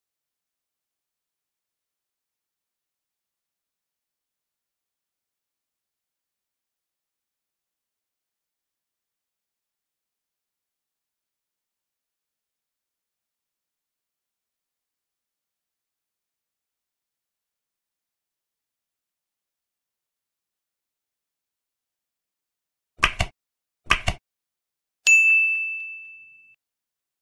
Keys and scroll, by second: 1.7 ctrl+s, 3.7 F7, 4.3 ctrl+s, 7.7 Up, 7.8 End, 8.5 ctrl+z, 9.1 space, 9.6 space, 10.8 space, 11.1 space, 12.1 space, 12.7 ctrl+e, 12.9 End, 13.1 Down, 17.9 ctrl+s, 19.0 ctrl+s, 26.7 ctrl+s.